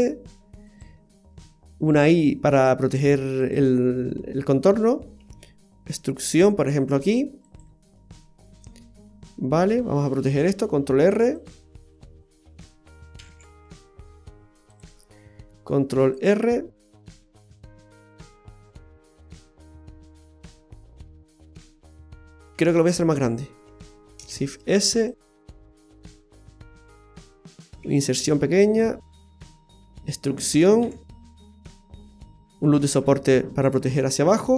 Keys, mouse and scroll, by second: 1.9 i, 3.8 middle click, 5.2 e, 8.0 middle click, 8.7-9.1 scroll up 2, 9.1 middle click, 11.0 ctrl+r, 13.2 g, 15.8 ctrl+r, 18.5-19.3 scroll down 3, 19.3 middle click, 20.7-21.8 scroll up 3, 22.4-22.7 ctrl+z, 22.9 ctrl+z, 23.1 ctrl+z, 24.3 shift+s, 25.2 s, 29.5 middle click, 30.8 e, 32.9 ctrl+r.